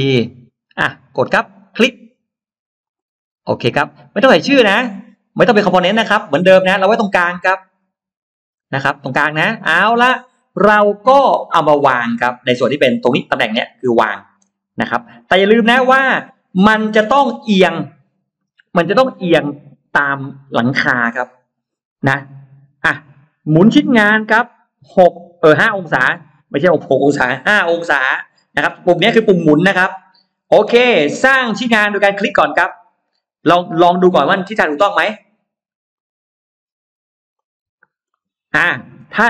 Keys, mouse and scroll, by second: 0.3 middle click, 1.6 click, 2.7 click, 4.5 click, 9.8 middle click, 11.1-12.8 scroll up 2, 13.7 scroll up 2, 13.9 middle click, 23.8 click, 26.0 5, 32.7 click, 35.8 click, 37.2 click, 38.0-39.2 middle drag.